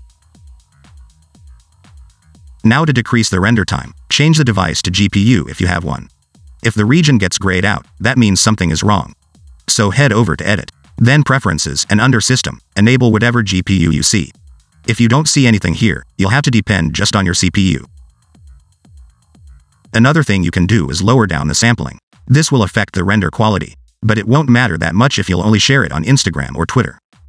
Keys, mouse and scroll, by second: 0.7 click, 1.1 alt+d, 2.1 g, 2.8 click, 4.1 click, 5.2 click, 9.8 click, 20.1-20.8 scroll down 4, 24.1 click.